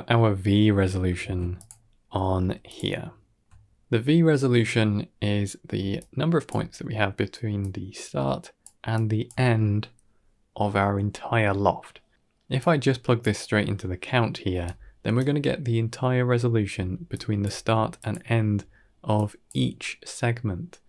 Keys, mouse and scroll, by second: 0.3 scroll down 4, 0.7 middle click, 1.1 shift+d, 1.6 middle click, 2.1 g, 2.9 ctrl+middle click, 3.4 middle click, 3.8 g, 5.6 d, 5.8 click, 6.3 d, 6.8-7.4 d, 7.5-8.5 drag, 8.5-9.1 typing, 8.8 click, 12.5-13.1 drag, 14.4 d, 14.5 right click, 16.6-19.3 typing, 17.0 click, 17.8 click, 19.0 click, 20.7 d.